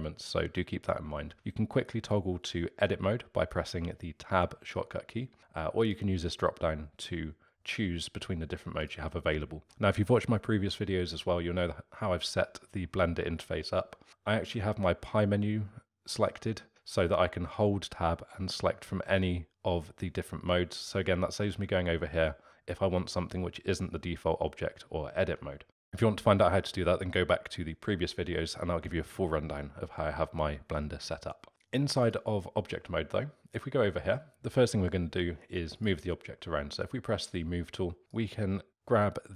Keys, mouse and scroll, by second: 1.3 Tab, 5.3 Tab, 5.8-8.7 drag, 8.8 click, 14.5-15.5 Tab, 22.1 Tab, 31.5 Tab, 32.0 click, 35.7 click, 38.1-39.3 drag.